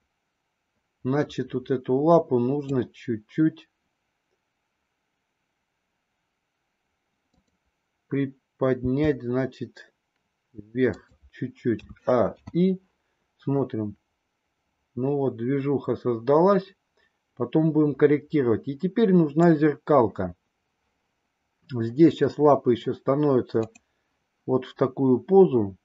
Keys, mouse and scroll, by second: 8.8 g, 11.8 a, 12.3 i, 13.5-19.5 drag, 23.4 click.